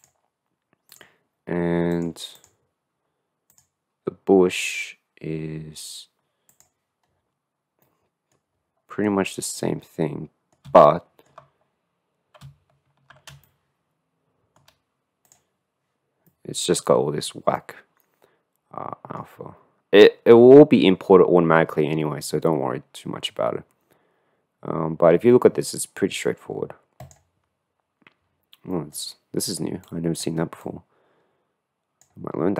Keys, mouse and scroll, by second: 1.0 click, 2.0 click, 2.4 click, 7.2 middle click, 8.0 middle click, 8.4-9.7 scroll up 1, 9.7-10.9 middle drag, 10.9-11.5 ctrl+drag, 13.6 shift+drag, 14.4 shift+middle click, 16.3 click, 16.5 middle click, 17.5 middle click, 29.9 click, 30.7-32.2 drag.